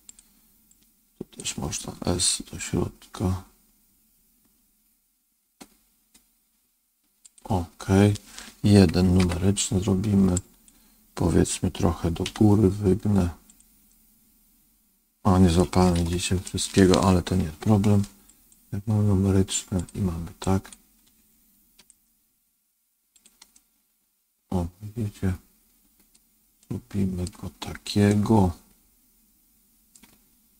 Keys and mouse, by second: 0.7 click, 2.1 s, 9.1 KP_1, 10.3 click, 12.2 g, 13.8-15.5 middle drag, 15.9 ctrl+z, 16.4 middle click, 17.3 KP_1, 18.3 click, 19.7 click, 20.5 click, 21.7 g, 23.4-26.1 middle drag, 26.5 middle click, 28.0-29.8 middle drag.